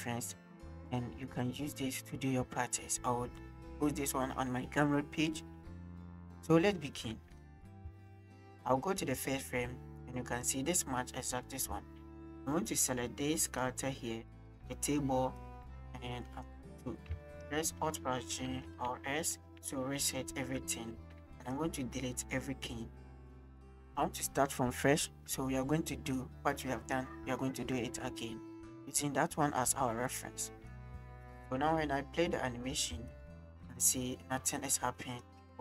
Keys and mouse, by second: 7.9 space, 9.2 click, 13.5-16.5 drag, 17.8 alt+a, 18.3 alt+g, 18.6 alt+r, 19.0 alt+s, 20.9 a, 21.2 x, 29.5-30.7 drag, 30.9 space, 32.9 space, 33.1-35.3 drag.